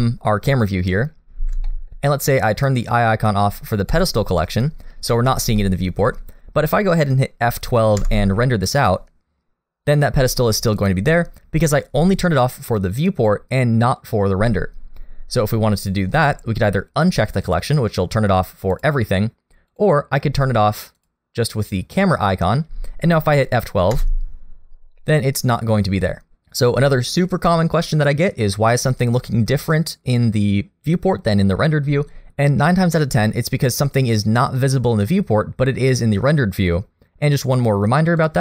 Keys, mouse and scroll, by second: 1.1-1.5 scroll up 1, 1.7 shift+middle click, 3.9 click, 5.6 shift+middle click, 11.6 F12, 17.5 click, 18.7 click, 19.7 click, 21.0 click, 24.5 F12, 32.2 click, 38.2 click.